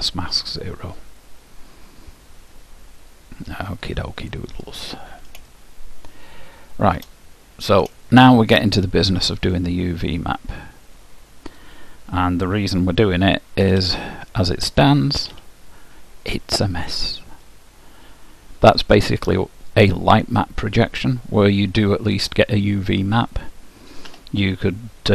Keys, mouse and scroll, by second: 0.0-1.9 drag, 5.7-7.7 middle drag, 8.1-11.7 middle drag, 11.7-13.5 drag, 13.8 Tab, 15.3 a, 17.7-23.6 middle drag, 24.2 p.